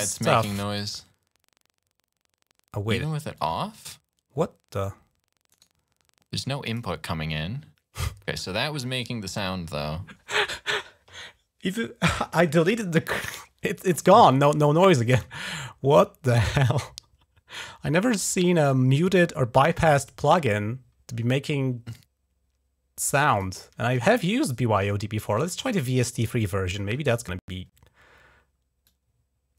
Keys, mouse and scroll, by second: 0.5 click, 3.2 click, 5.3 right click, 6.5 click, 15.0 right click, 23.1 click, 25.4 click, 25.5 click, 25.7 click, 26.5 click, 28.7 click.